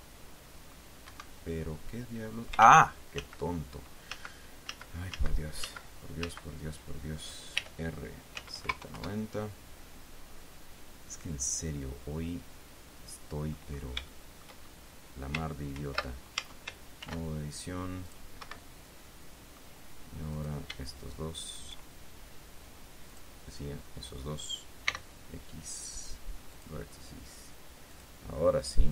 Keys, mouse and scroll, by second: 0.0 z, 1.4 Escape, 3.0 ctrl+z, 4.5 ctrl+z, 7.9 r, 8.7 z, 8.9 KP_9, 9.0 KP_0, 9.3 KP_Enter, 11.5-14.0 drag, 14.4 shift+click, 15.0 shift+scroll up 2, 16.1 ctrl+r, 16.7 ctrl+Tab, 17.5 ctrl+r, 18.4 click, 18.7 Escape, 19.4 middle click, 20.7 right click, 23.4 click, 25.2 x, 26.9 click, 28.2 click.